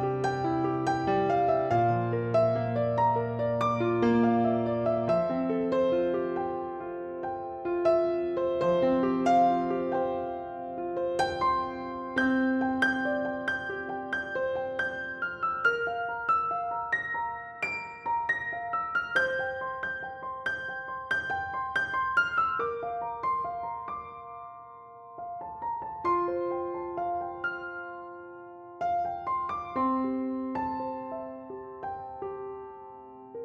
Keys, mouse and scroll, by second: 0.1 click, 0.4 click, 0.8 ctrl+z, 2.3 KP_3, 3.3 Tab, 3.6-4.1 drag, 4.1 shift+middle click, 4.2 z, 4.4-4.8 scroll down 1, 4.8 r, 5.4 click, 5.6 scroll down 1, 5.7-7.1 middle drag, 6.6 KP_2, 7.1 click, 7.5 KP_3, 7.8-8.2 scroll up 1, 8.2 Tab, 8.4 shift+middle click, 8.6 scroll up 1, 8.8 click, 9.6 click, 10.6 shift+click, 10.8 click, 11.1 click, 11.4 click, 11.8 shift+click, 12.0 shift+click, 12.2 shift+click, 12.7 s, 13.1 click, 13.2 ctrl+z, 14.8 click, 15.0 shift+click, 15.6 shift+click, 16.0 s, 17.3 click, 17.4 scroll down 1, 17.6-19.4 middle drag, 18.0 Tab, 18.4 KP_3, 19.4-20.0 drag, 20.0-21.3 shift+middle drag, 20.3 Tab, 20.5 scroll up 1, 21.3 click, 21.5 b, 22.3 click, 22.6 click, 23.0 b, 24.3 ctrl+z, 24.6-25.6 drag, 25.8 r, 27.4 click, 27.5-30.3 middle drag, 28.4 ctrl+z, 28.8 KP_3, 29.0-29.3 scroll up 1, 29.3 KP_1, 29.6 scroll up 1, 29.8 alt+z, 30.3 click, 30.5 b, 31.2 r, 32.0-33.4 drag, 33.0 r.